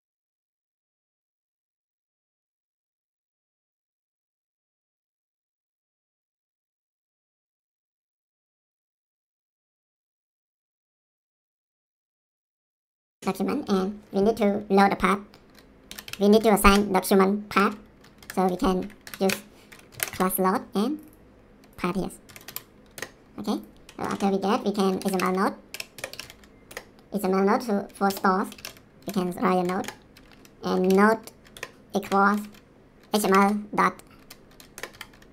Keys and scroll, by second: 0.0-4.2 typing, 0.3 Return, 4.5 ctrl+s, 8.2-13.4 typing, 10.7 Return, 12.1 Return, 15.6-20.6 typing, 19.0 Down, 19.2 Return, 22.0-22.9 typing, 24.0 Return, 24.7-26.7 typing, 28.1-34.9 typing, 31.6 Return, 34.8 Return.